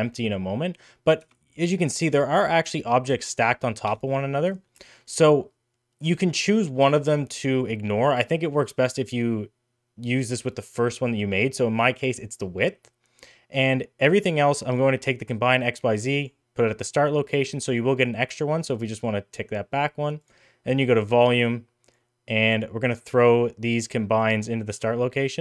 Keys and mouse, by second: 1.4 middle click, 1.8 middle click, 2.2 shift+middle click, 2.5 middle click, 3.1 g, 4.3 middle drag, 4.8 shift+middle click, 5.0 middle click, 14.9-16.2 drag, 19.0-20.3 drag, 21.2 middle click, 21.9 click, 24.0-24.8 drag.